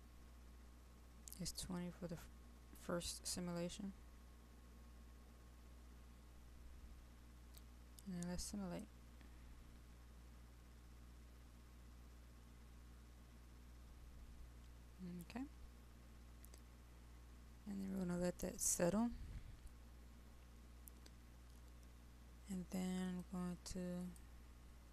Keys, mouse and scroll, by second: 6.6 click.